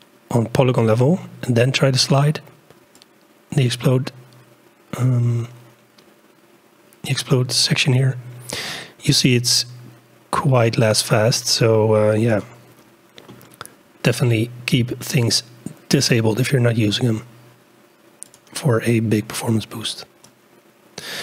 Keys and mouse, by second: 3.0 click, 3.8 click, 4.4 middle click, 4.6 click, 4.8 middle click, 5.4 click, 7.5 click, 8.3 click, 9.8 click, 9.9 middle click, 10.6 click, 11.3 click, 11.4 middle click, 12.3 click, 15.1-16.2 drag, 18.3 click, 20.3 click, 20.5 click.